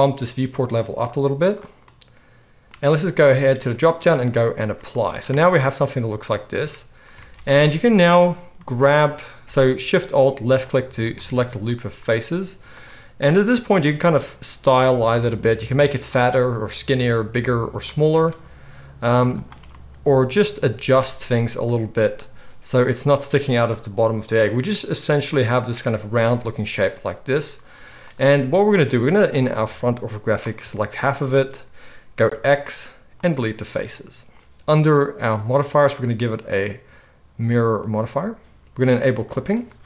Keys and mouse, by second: 1.0-7.7 drag, 5.3 Tab, 7.2 alt+a, 7.7-10.5 alt+shift+middle drag, 10.5 alt+shift+click, 10.6-12.7 alt+shift+middle drag, 12.7 click, 12.8-28.9 middle drag, 13.2 s, 18.0 alt+a, 21.6 g, 26.2 KP_1, 27.7 z, 28.9-39.3 drag, 32.3 x, 39.3-39.8 middle drag.